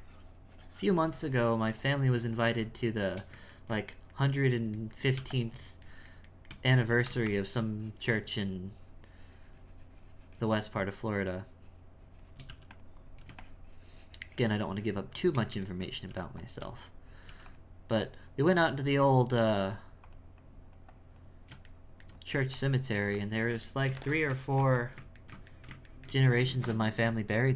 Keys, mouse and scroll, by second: 0.0-3.0 shift+drag, 3.6-5.3 ctrl+middle drag, 5.3 shift+click, 5.9-6.9 shift+middle drag, 7.3-10.3 shift+drag, 13.4-15.7 shift+drag, 15.7 ctrl+middle click, 16.1 f, 16.6 f, 18.0-19.4 drag, 19.4 f, 20.4-21.7 drag, 21.7 shift+middle click, 22.3 f, 23.0 f, 23.7-27.5 ctrl+middle drag.